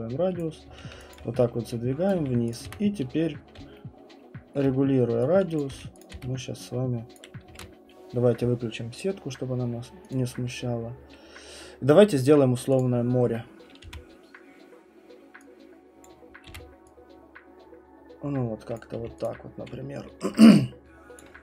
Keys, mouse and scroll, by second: 0.4 click, 0.7 q, 1.1 alt+click, 2.1 right click, 2.2-4.6 typing, 2.5 click, 4.5 middle click, 5.6 click, 5.7 q, 6.0 click, 6.1 w, 7.1 click, 7.5 ctrl+z, 10.1 click, 10.5-10.9 scroll, 12.8 click, 12.8 middle click, 13.3 middle click, 13.4 middle click, 13.4 middle click, 13.8 r, 16.0 click, 16.5 w, 18.7 click, 18.9 q, 19.2 click, 21.2 click.